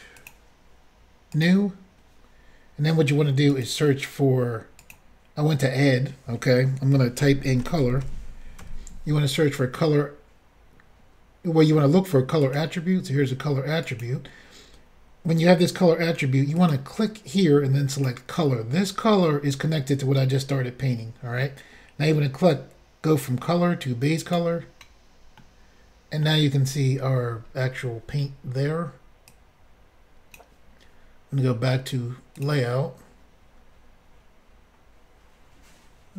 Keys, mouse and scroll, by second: 0.2 click, 0.3 click, 1.3 click, 1.4 click, 3.5 click, 4.8 click, 7.2-9.1 typing, 12.4 click, 13.8 click, 16.6 click, 17.9 click, 18.0 click, 22.5 click, 25.4 middle click, 25.6 scroll up 1, 26.6-27.6 scroll up 4, 29.3 click, 32.4 click, 32.4 click.